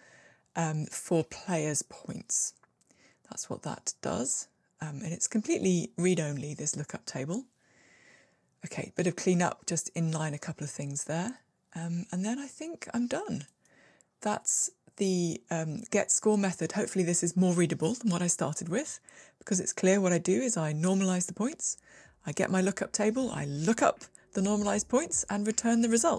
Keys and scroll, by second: 7.9 alt+super+n, 11.6 super+x.